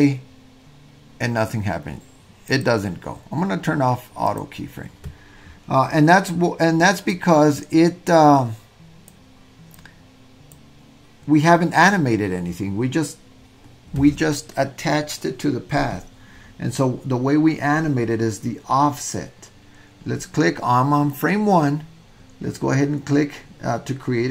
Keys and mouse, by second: 2.5 click, 4.4 click, 7.2-9.2 drag, 9.7 click.